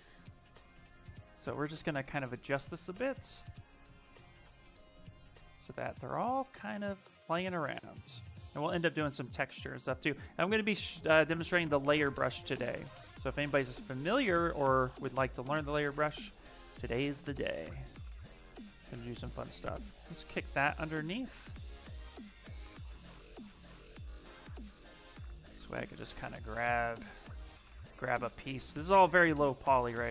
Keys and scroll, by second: 2.5 s, 26.4 s.